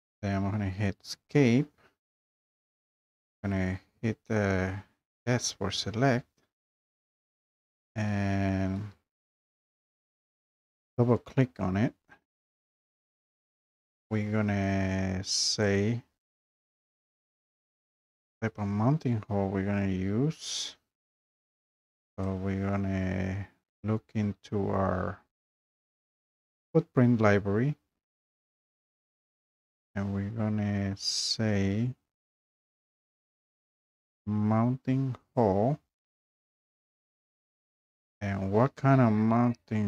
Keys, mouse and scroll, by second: 0.9 Escape, 5.3 s, 7.9 Escape, 8.7 Escape, 10.1 click, 10.2 click, 15.7 click, 17.9 click, 34.0 click, 35.4 click.